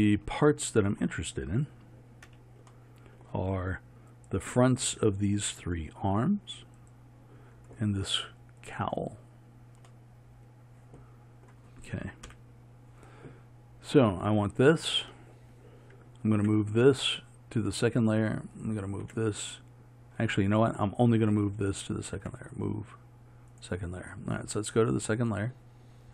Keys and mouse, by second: 4.2-12.3 drag, 12.3 KP_1, 16.4 m, 18.6-23.5 drag, 25.7-26.1 drag.